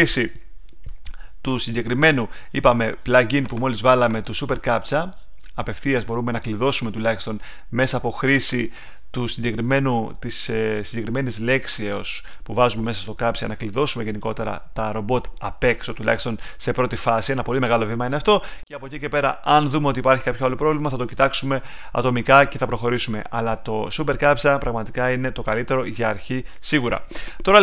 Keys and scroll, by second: 0.9 super+Tab.